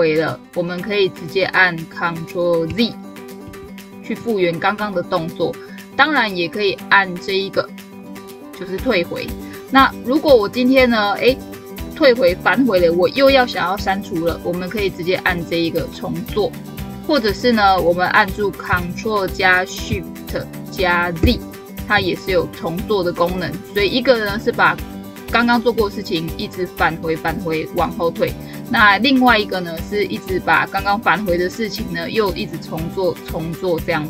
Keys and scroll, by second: 3.3 ctrl+z, 18.5 ctrl+z, 21.0 ctrl+shift+z.